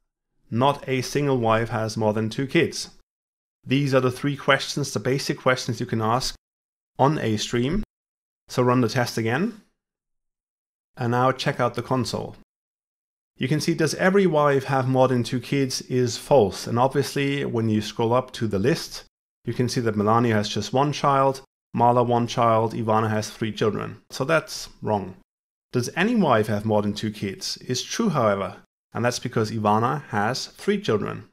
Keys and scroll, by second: 8.0 ctrl+F5.